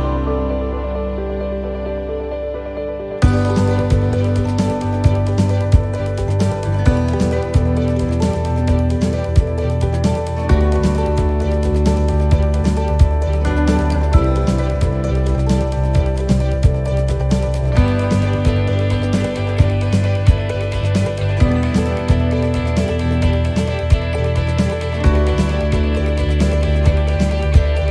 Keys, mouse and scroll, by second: 0.2 middle click, 1.6 shift+right click, 2.1 middle click, 3.6-3.9 scroll down 2, 4.1 shift+middle click, 4.5 middle click, 9.9 shift+right click, 9.9 middle click, 10.3 scroll down 1, 10.5 shift+middle click, 11.0 middle click, 11.5 shift+middle click, 12.2 middle click, 15.0 click, 24.9 click.